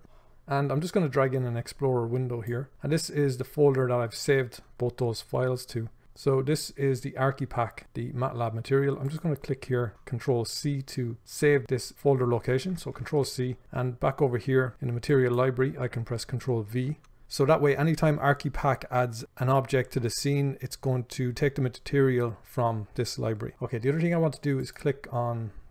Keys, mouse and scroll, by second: 0.0-25.7 drag.